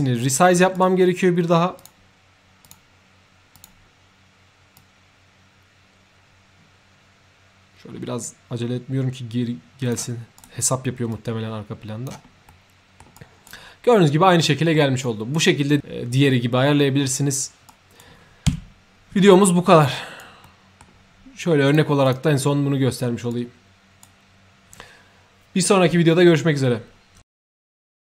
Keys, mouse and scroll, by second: 0.2 shift+click, 0.7 shift+right click, 1.7 shift+click, 2.6 shift+click, 3.5 shift+click, 4.7-9.9 shift+drag, 10.3 shift+right click, 11.0-12.0 shift+drag, 12.4 shift+middle click, 13.1-13.4 shift+right drag, 14.3 shift+middle click, 15.0-15.3 shift+right drag, 17.6 shift+right click, 18.5 3, 19.4 middle click, 19.9 right drag, 20.4 middle click, 21.6 click, 22.0 click, 23.2-24.0 right drag.